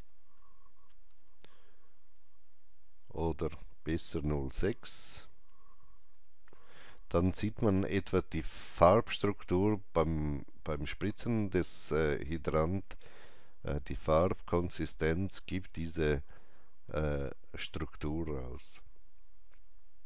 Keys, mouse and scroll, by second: 0.3 KP_5, 1.0 KP_Enter, 4.1 KP_Enter, 4.1 click, 4.1 KP_5, 5.1 KP_Decimal, 5.4 KP_6, 5.9 KP_Enter, 8.9 KP_Enter, 8.9 KP_6, 8.9 KP_Decimal, 9.1 click, 9.3-15.5 alt+drag.